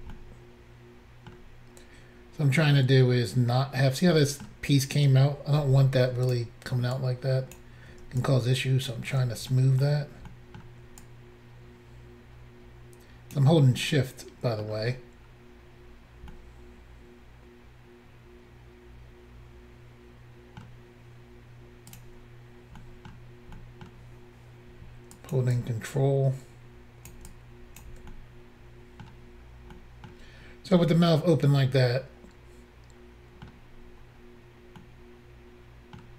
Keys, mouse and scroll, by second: 0.1 middle click, 2.0 scroll up 2, 4.2 middle click, 5.6 f, 6.3 click, 6.9 ctrl+click, 7.5 click, 8.2 shift+click, 9.5 middle click, 10.2 middle click, 11.0 shift+click, 13.9 middle click, 14.6 middle click, 15.8 scroll down 1, 16.3 middle click, 20.9-21.8 scroll up 1, 21.9 click, 22.0 click, 22.8 middle click, 23.6 middle click, 25.1 ctrl+click, 25.5 ctrl+click, 27.3 ctrl+click, 28.1 middle click, 29.7 middle click, 30.3-30.6 scroll down 2, 30.8 middle click, 33.9-34.2 scroll up 1, 34.8 middle click.